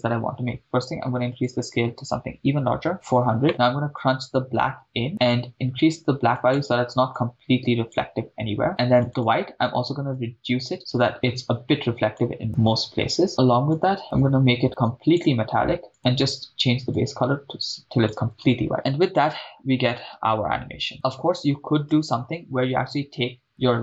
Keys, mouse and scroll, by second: 0.0-1.3 right drag, 1.3-2.9 drag, 2.9 0, 3.5 middle click, 4.0-5.1 drag, 5.2 click, 9.1 click, 13.7-15.2 drag, 15.9 click, 18.7 shift+space, 21.9 shift+space.